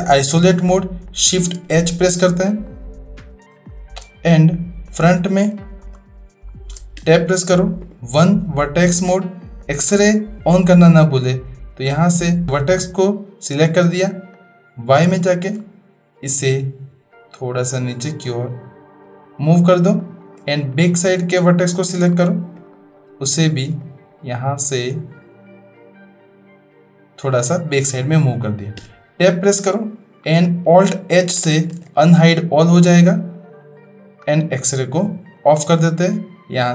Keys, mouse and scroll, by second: 1.6 shift+h, 2.6-3.6 middle drag, 3.7-4.0 shift+middle drag, 4.9 click, 5.6 shift+middle click, 6.5 shift+middle click, 7.0 Tab, 7.8 1, 10.9-12.0 drag, 14.3 click, 15.2 shift+middle click, 15.3 shift+click, 16.3-19.4 drag, 20.0 shift+click, 20.9 click, 22.7 shift+click, 23.9-27.0 drag, 28.8 Tab, 29.5-29.9 middle drag, 30.4 click, 31.8 alt+h, 34.2 click, 35.0 middle click, 36.1-36.7 drag.